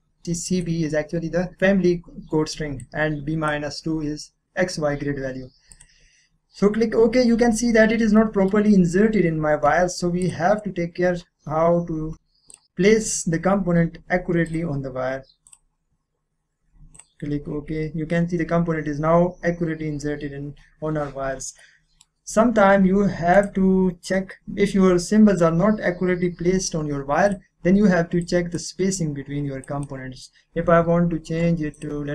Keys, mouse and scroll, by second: 2.8-5.2 drag, 5.7 click, 7.2 click, 7.7-8.1 scroll up 1, 8.1-10.2 middle drag, 10.2 click, 10.4 click, 12.5 click, 13.0-14.4 scroll up 1, 14.7 click, 17.6 scroll up 1, 18.9-21.1 scroll down 1, 21.6 scroll up 1, 21.6-23.4 middle drag, 23.4 right click, 24.0 click, 24.0 k, 24.4 click, 27.3-29.6 drag, 30.6 typing, 31.7 click.